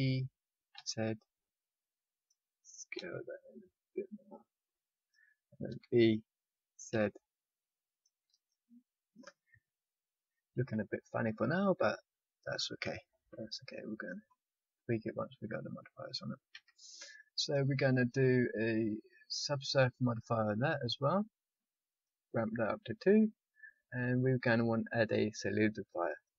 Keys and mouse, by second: 2.9 s, 5.6 e, 11.5-13.3 middle drag, 13.3 KP_5, 16.4 a, 17.3-19.5 drag, 21.9-26.3 drag.